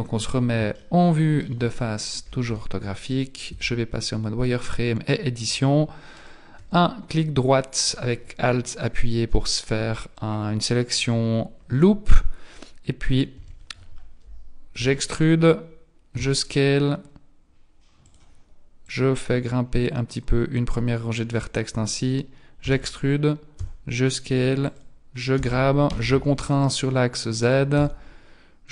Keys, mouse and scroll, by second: 0.6 shift+scroll down 1, 0.8 shift+middle click, 2.4 z, 3.5 Tab, 4.5 middle click, 6.2 alt+right click, 13.3 KP_1, 14.8 e, 16.5 e, 18.8 click, 22.6 e, 25.4 g, 27.8 s.